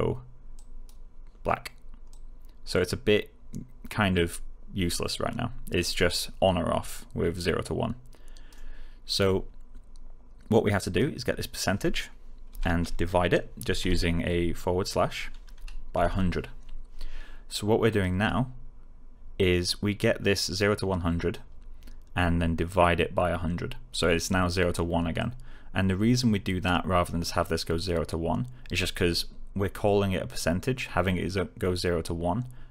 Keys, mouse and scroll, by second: 0.5 click, 10.8 click, 12.4 Right, 15.6-16.5 typing, 17.8 click, 25.1-26.7 click.